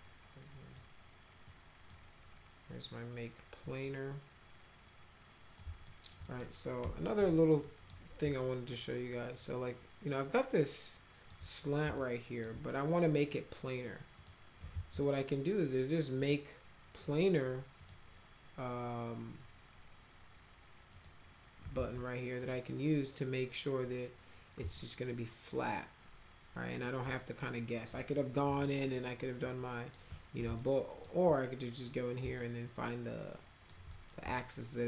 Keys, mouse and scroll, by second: 1.5 click, 3.6-5.6 drag, 5.9 alt+middle click, 6.3 middle click, 6.8 F2, 7.2 F3, 7.7 middle click, 8.4-11.3 alt+middle drag, 12.0 alt+middle click, 14.2 click, 14.7 ctrl+z, 16.2 click, 17.8 click, 20.9 click, 21.8 ctrl+z, 22.4 click, 24.8-26.8 alt+middle drag, 28.5 r, 29.4 click, 30.6 alt+middle click, 32.4-33.7 alt+middle drag, 33.9 middle click, 34.4-34.8 alt+middle drag.